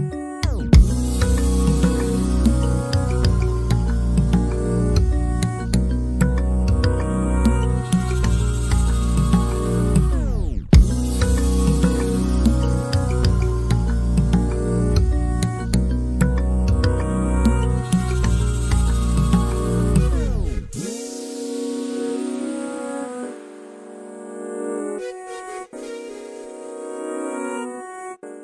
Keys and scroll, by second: 4.3-5.6 typing, 8.8 typing, 23.2 m, 26.8 q.